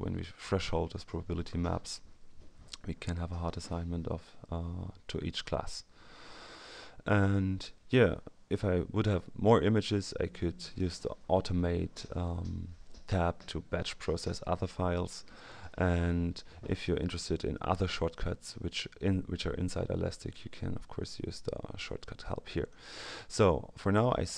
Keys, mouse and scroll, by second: 3.0-3.9 scroll up 2, 4.1-6.0 scroll up 1, 6.6-7.2 scroll up 2, 10.6 click, 17.0 click, 22.6 click, 24.2 click.